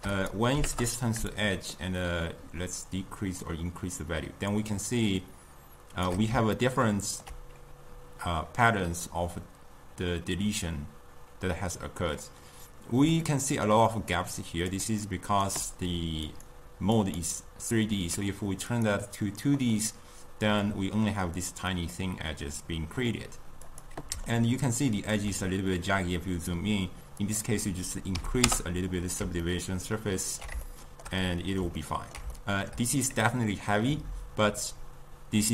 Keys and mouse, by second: 6.8-13.3 ctrl+middle drag, 13.3-15.1 drag, 15.1-17.3 right drag, 17.3-20.8 drag, 20.8-23.9 middle drag, 23.9 click, 24.6-28.7 ctrl+middle drag, 28.7-29.6 drag, 29.6-35.5 ctrl+middle drag.